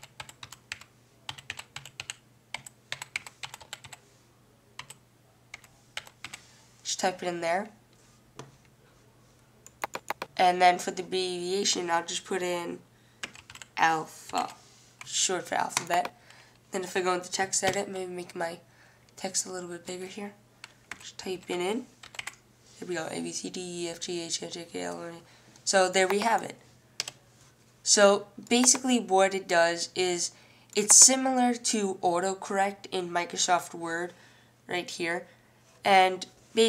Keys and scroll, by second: 0.0-6.9 typing, 13.4-16.6 typing, 20.9-22.8 typing, 24.2 typing.